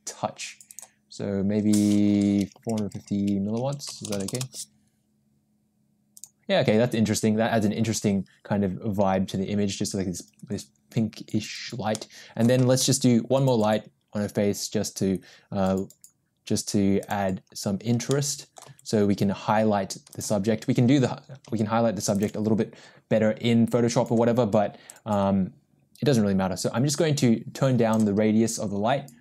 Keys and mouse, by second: 0.7-5.1 drag, 6.1 click, 12.3 middle click, 12.7 shift+a, 20.2 g, 22.5 g, 25.0-28.1 drag.